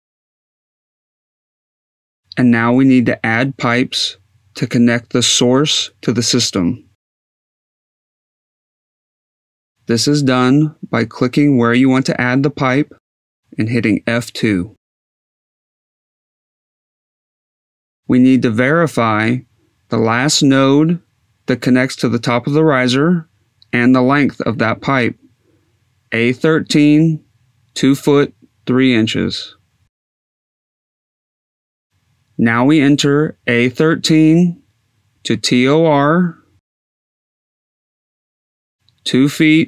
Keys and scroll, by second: 11.1 F2, 12.5 F2, 33.9 a, 34.6 1, 34.9 3, 36.1 Tab, 37.1 t, 37.7 r, 39.1 Tab.